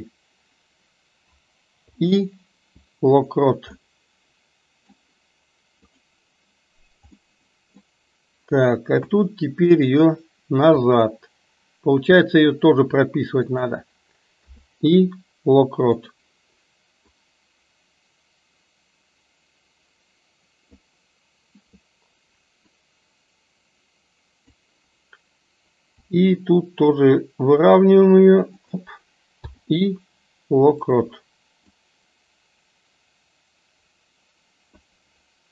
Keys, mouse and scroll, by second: 3.8-4.9 middle drag, 5.9 click, 7.2 middle click, 8.9 KP_1, 10.7 r, 14.5 i, 17.3-21.0 drag, 22.7-24.6 drag, 26.0 r, 29.4 i, 31.7-34.8 drag.